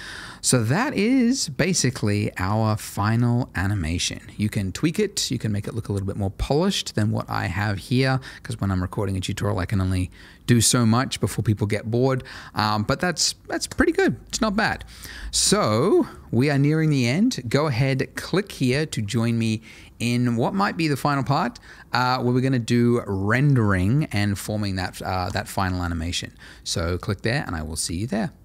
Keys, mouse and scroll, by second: 15.7 space.